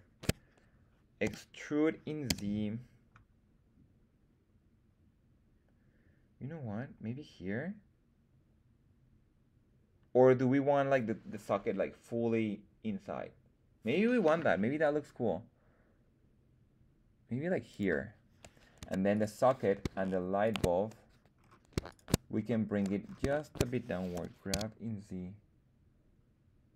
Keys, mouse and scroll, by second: 1.2 e, 2.2 z, 17.6 click, 18.7 Tab, 19.0 click, 19.0 right click, 20.3 shift+click, 21.3-21.7 scroll down 1, 21.8 shift+click, 21.8 shift+right click, 22.3-22.7 scroll down 1, 22.7-23.1 scroll up 2, 24.1 g, 24.4 z.